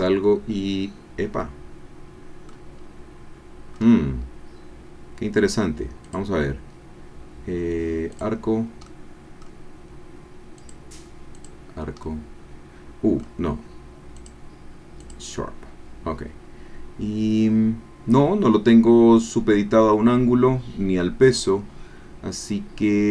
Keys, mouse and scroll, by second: 2.0 click, 2.9-3.3 scroll down 1, 3.6-4.0 scroll up 1, 4.3-4.7 scroll down 1, 6.0 click, 8.1 click, 8.8 click, 10.7 click, 11.4 click, 12.0-13.4 drag, 14.1 click, 15.0 click.